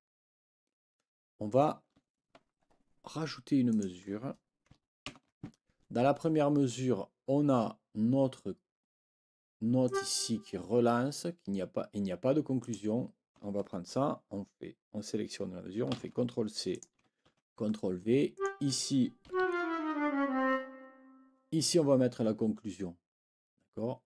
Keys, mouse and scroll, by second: 3.7 click, 5.1 ctrl+b, 9.9 click, 12.6 click, 15.9 ctrl+c, 16.7 click, 17.3 ctrl+v, 18.3 click, 19.3 Down.